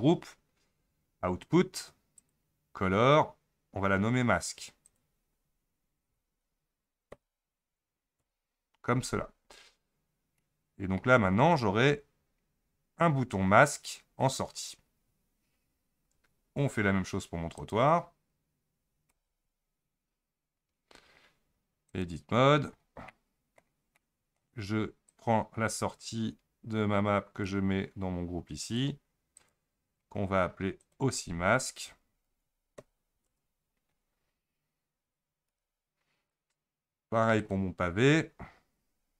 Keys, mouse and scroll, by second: 2.2 click, 3.7-4.9 scroll down 5, 4.9-7.9 drag, 10.4 middle click, 11.1 Tab, 11.7-15.3 scroll up 12, 17.6 click, 19.1 a, 20.0 Home, 21.1-21.9 scroll up 1, 21.9 click, 22.4-23.1 scroll down 11, 23.1-25.1 middle drag, 25.1-28.1 drag, 28.6 click, 29.4 click, 29.8-30.8 scroll down 5, 30.8-33.9 drag, 35.5 Tab, 37.4 click.